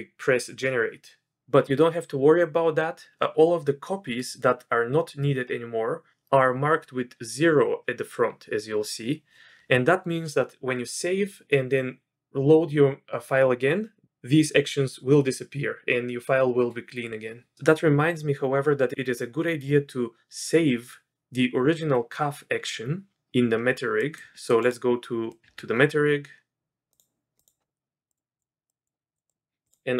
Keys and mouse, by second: 25.3 middle click, 25.4 Tab, 27.6 click, 28.1 click, 28.7 click, 29.1 click, 29.6-29.9 drag.